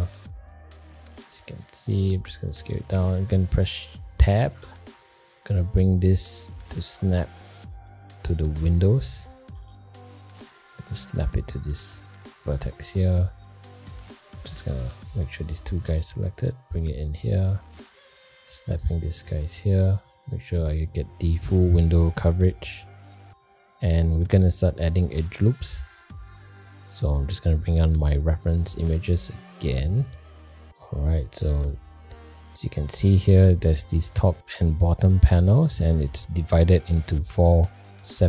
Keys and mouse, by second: 1.3 g, 2.3 middle click, 4.5 Tab, 5.4 click, 6.3 middle click, 6.8 g, 9.1 click, 9.8 g, 11.7 middle click, 12.8 middle click, 13.4 click, 14.2 shift+middle click, 14.5 middle click, 15.5 middle click, 15.8 g, 17.9 click, 18.6 g, 22.3 middle click, 23.1 middle click, 24.4 middle click, 24.9 shift+middle click, 25.3 middle click.